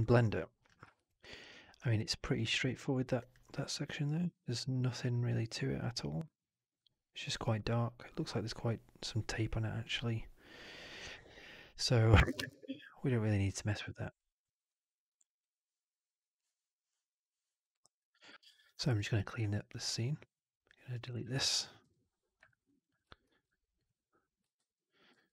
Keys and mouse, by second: 0.8 alt+drag, 1.1 alt+right drag, 1.3 alt+right drag, 18.3 alt+right drag, 18.4 alt+click, 18.9 click, 19.6 shift+click, 20.8 shift+click, 21.7 Delete, 22.3 alt+right drag, 22.6 alt+drag, 23.1 ctrl+s, 23.2 ctrl+s.